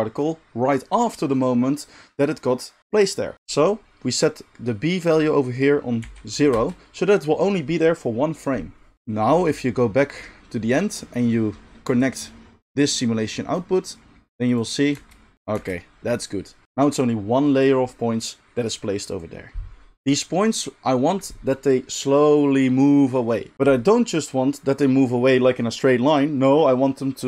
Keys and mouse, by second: 14.9 space, 15.5 space.